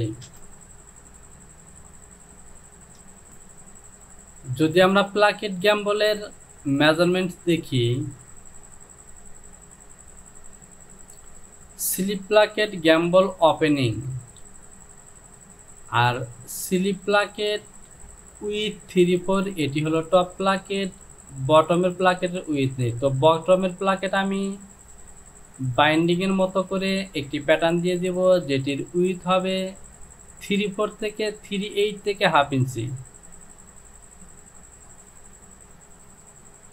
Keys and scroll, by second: 0.3 Return.